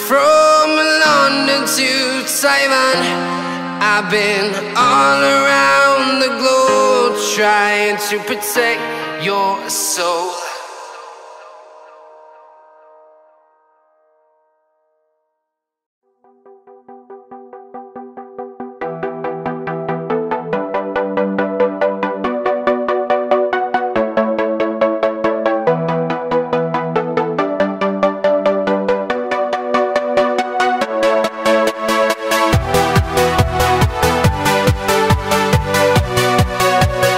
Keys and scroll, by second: 0.5 alt+super+c, 1.6-3.0 typing, 15.3-16.1 typing, 18.0 typing, 20.4 a.